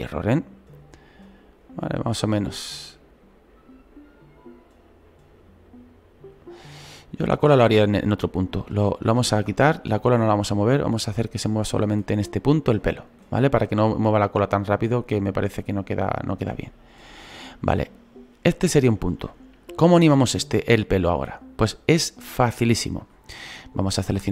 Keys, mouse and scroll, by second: 7.1 ctrl+z, 7.9 ctrl+z, 10.9-24.3 drag.